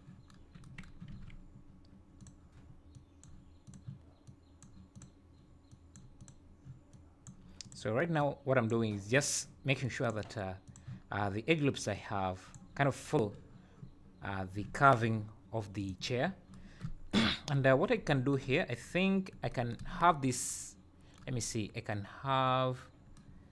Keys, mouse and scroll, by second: 1.1 alt+a, 2.1 click, 2.9 click, 3.6 click, 4.2 click, 4.9 click, 5.7 click, 6.2 click, 6.9 click, 7.6 click, 8.1 click, 9.7 click, 9.8 click, 10.6 click, 11.9 click, 15.8 click, 17.8 scroll up 2, 18.9 scroll down 3.